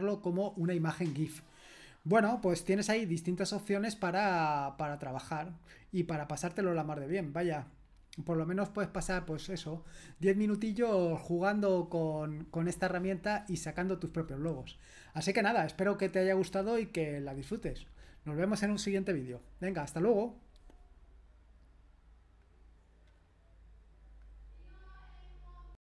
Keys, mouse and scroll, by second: 2.2 scroll up 1, 2.4-4.3 scroll down 1, 4.3-4.6 scroll up 2, 4.6-5.4 scroll down 2, 5.4-6.3 scroll down 1, 6.3-7.9 scroll down 1, 7.9-12.5 scroll down 1, 22.4 click, 24.2 click, 24.7-25.8 drag.